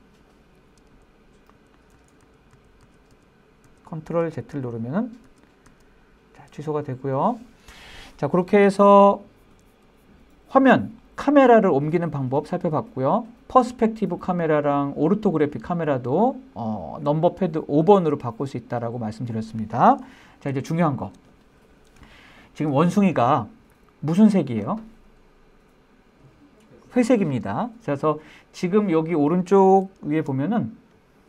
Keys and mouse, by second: 0.1 click, 1.2 super+z, 1.8 super+z, 2.2 super+z, 2.5 super+z, 2.8 super+z, 3.1 super+z, 3.4 super+z, 3.9 super+z, 4.3 super+z, 5.5 super+z, 15.6-16.1 middle drag, 20.9-21.3 shift+middle drag, 21.5 middle click, 22.6-22.9 shift+middle drag, 28.1-28.7 middle drag.